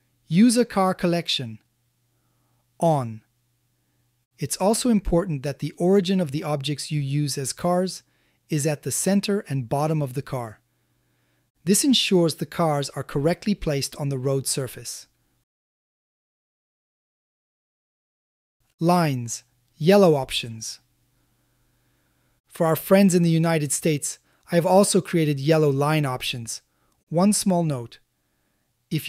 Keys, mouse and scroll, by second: 2.0 click, 4.4-5.1 middle drag, 6.0 ctrl+middle click, 6.4 shift+middle click, 7.5 click, 8.3-9.4 middle drag, 10.4-11.3 middle drag, 12.7-13.4 middle drag, 14.2 middle drag, 14.8 shift+middle click, 15.7 middle click, 19.1 click, 22.3 click, 26.1 click.